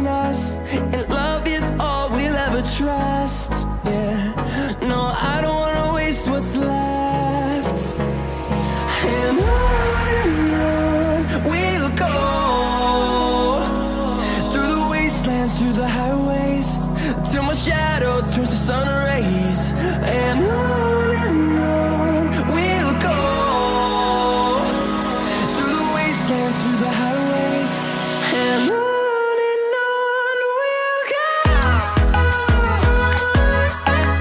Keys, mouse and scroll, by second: 10.2-11.7 scroll up 1, 11.7 click, 11.7 click, 13.5-16.9 drag, 16.9 right click, 16.9 right click, 18.6-23.3 drag, 23.4 click, 23.4 typing, 24.2 scroll up 1, 27.6-32.2 drag, 28.9 typing, 32.2 F10.